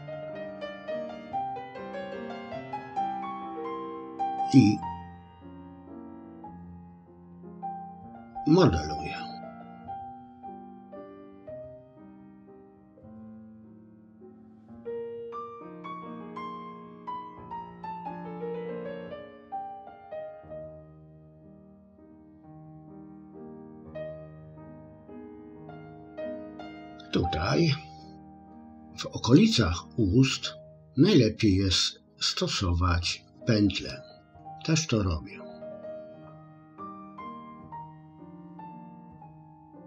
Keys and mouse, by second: 0.6-1.8 middle drag, 2.3 middle click, 4.5-6.2 drag, 7.1 click, 10.9 click, 11.5 middle click, 12.5 click, 14.5 ctrl+r, 15.2 click, 15.5 click, 15.6 click, 15.8 click, 16.1 middle click, 16.6 ctrl+click, 17.4 middle click, 18.0 click, 18.8 click, 19.4 click, 19.6 middle click, 20.0 click, 20.7 click, 21.1 click, 21.4 middle click, 21.6 middle click, 22.2 click, 22.9 click, 23.4 click, 23.9 click, 24.7 middle click, 25.1 click, 25.5 click, 28.7 middle click, 30.7 middle click, 33.9 middle click, 36.2-37.6 drag, 38.1 click, 38.5 click, 38.9 click, 39.2 click, 39.6 click.